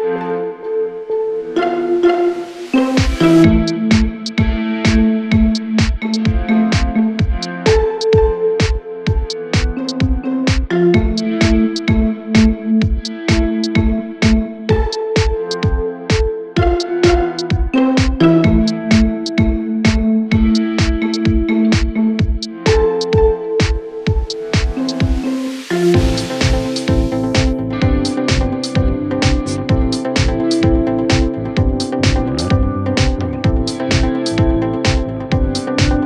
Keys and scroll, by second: 0.0-0.7 typing, 16.8-17.5 typing, 29.9-30.7 typing.